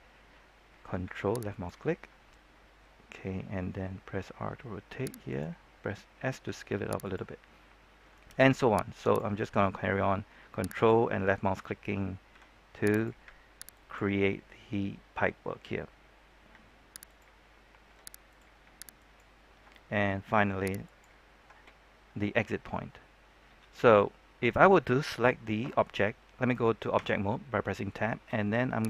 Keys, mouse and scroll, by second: 1.5 ctrl+click, 4.1 r, 5.2 click, 6.4 s, 7.0 click, 8.9 ctrl+click, 10.6 ctrl+click, 12.3 ctrl+s, 12.9 click, 13.7 ctrl+click, 16.4 ctrl+r, 17.0 click, 17.8 g, 18.2 click, 18.9 ctrl+click, 20.8 ctrl+click, 21.8-24.0 scroll down 1, 26.9 Tab.